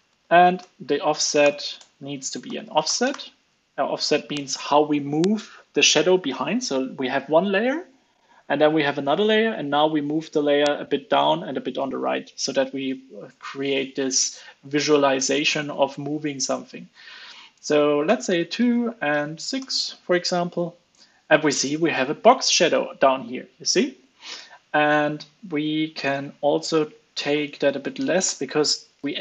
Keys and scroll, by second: 14.3 super+p, 15.4 super+p, 20.2 super+s, 28.2 alt+Right.